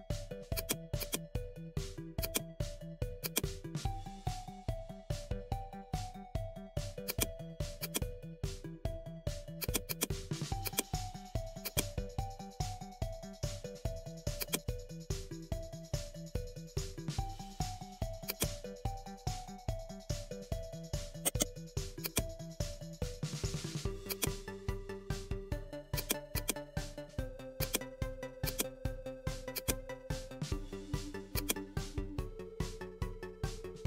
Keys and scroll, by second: 19.2 ctrl+i, 19.8 x.